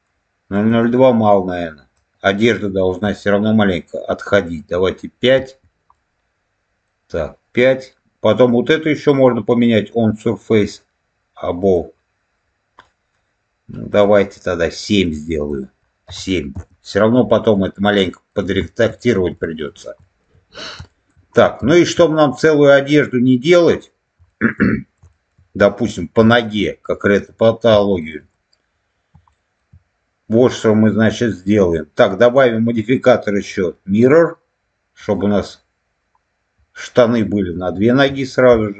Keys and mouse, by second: 0.6-5.5 drag, 5.8 middle click, 8.4-11.7 drag, 12.7 middle click, 13.9-16.6 drag, 17.0 middle click, 17.8 middle click, 18.6 shift+middle click, 19.3 shift+middle click, 19.9 shift+middle click, 20.8 shift+middle click, 21.6 shift+middle click, 24.2 shift+middle click, 25.0 shift+middle click, 26.2 shift+middle click, 26.9 shift+middle click, 27.7 shift+middle click, 29.3 shift+middle click, 32.2-35.1 drag.